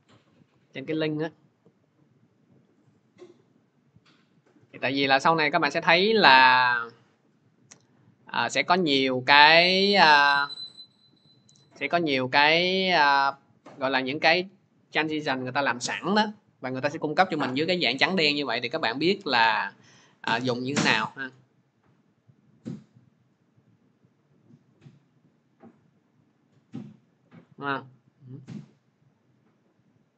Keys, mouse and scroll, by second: 2.7 click, 2.9 click, 5.7 click, 8.2 click, 11.5 click, 12.2 right click, 13.5 click, 13.5 right click, 13.7-16.6 drag, 13.7-17.3 right drag, 18.0-23.0 drag, 27.1 click.